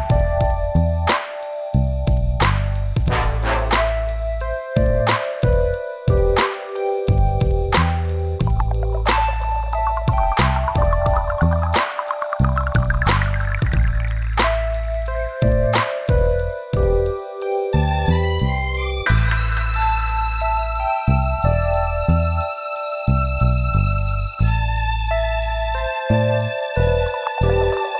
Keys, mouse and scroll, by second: 1.2 click, 1.3 click, 2.3 click, 2.5 click, 3.6 click, 8.3 scroll up 2, 9.3 click, 12.4 scroll down 2, 13.1 click, 14.2 click, 23.1 click, 23.8 click, 23.9 click, 24.4 scroll up 1, 26.5 click, 27.7 click.